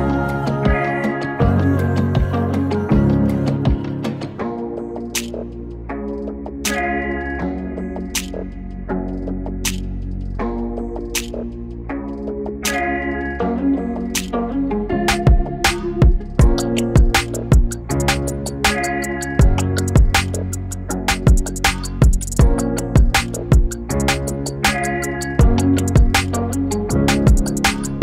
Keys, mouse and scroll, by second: 4.7 p, 5.3-10.2 drag, 10.2-15.6 drag, 17.6-19.7 drag, 20.0 click, 20.7 ctrl+shift+c, 22.8 Return, 24.2-28.0 drag.